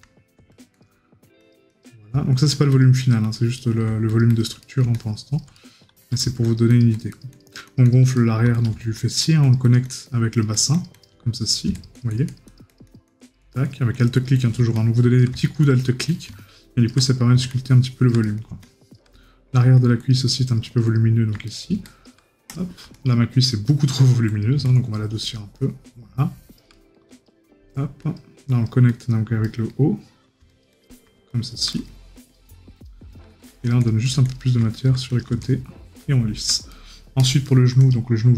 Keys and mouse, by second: 3.6 right click, 8.1 right click, 17.0 right click, 18.2 right click, 21.5 right click, 26.7 right click, 29.4 right click, 31.7 right click, 36.7 right click.